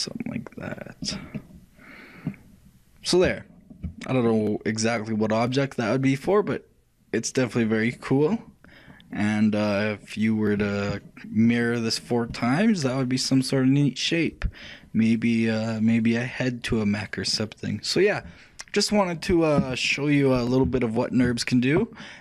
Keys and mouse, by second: 1.5-3.3 middle drag, 3.5-6.4 middle drag, 7.9-22.2 middle drag.